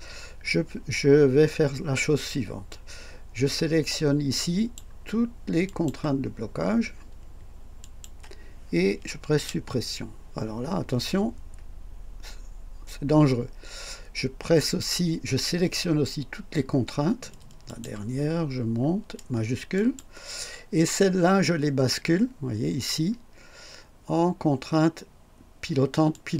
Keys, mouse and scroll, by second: 2.7-5.0 drag, 5.7 click, 6.3-6.6 scroll down 1, 7.8 shift+click, 9.4 Delete, 17.7 click, 18.3 scroll up 1, 19.8 shift+click, 26.1 click.